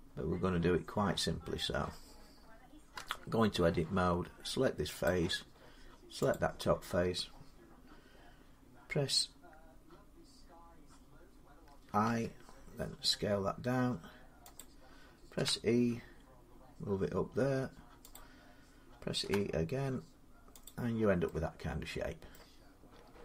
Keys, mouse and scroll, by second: 2.7 Tab, 4.8 click, 6.1 click, 11.8 i, 14.4 click, 15.2 e, 17.9 click, 19.0 e, 20.4 click, 22.1 middle click.